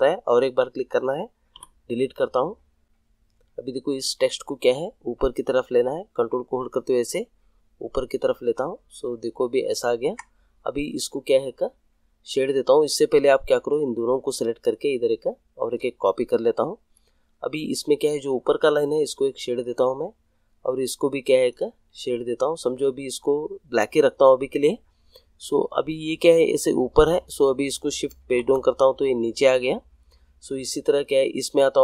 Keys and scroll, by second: 1.5 Delete, 28.2 shift+Page_Down.